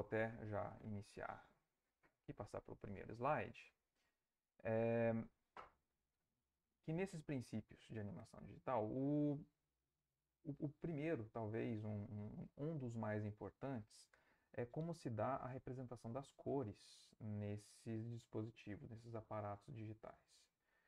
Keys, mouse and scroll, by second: 3.0 click.